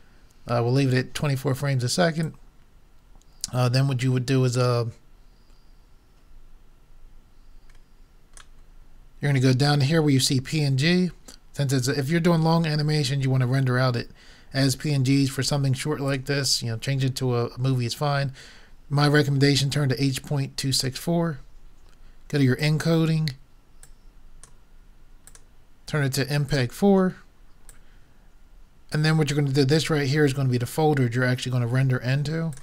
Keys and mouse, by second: 2.2-4.2 drag, 16.1-17.9 drag, 22.6-27.1 drag, 27.7-29.6 drag, 32.5 click.